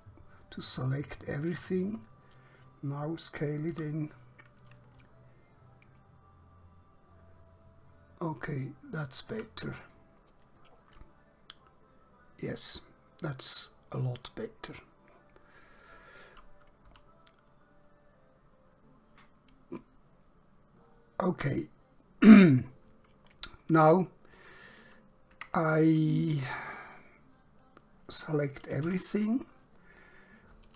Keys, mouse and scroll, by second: 3.8 s, 9.1 shift+click, 9.9 click, 11.1 middle click, 16.9 KP_7, 22.7 scroll down 1, 25.5 Tab, 28.9 a.